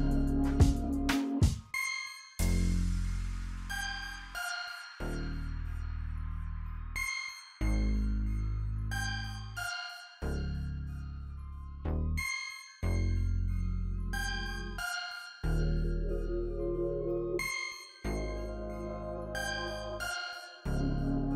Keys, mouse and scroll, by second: 0.8 click, 4.8 F9, 5.5 click, 6.9 click, 11.4 click, 12.9 click, 13.4 F9, 14.8 click, 16.5-17.2 scroll up 1, 17.2 F9, 17.9 click, 19.6 click.